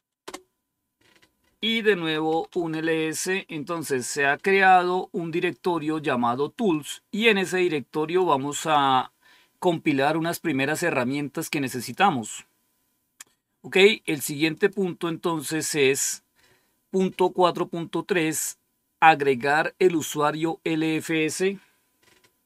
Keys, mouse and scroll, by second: 0.1 Return, 1.8-2.7 typing, 6.4-8.1 drag, 8.5 click, 11.7 click, 12.5-12.9 scroll down 1, 14.4 click.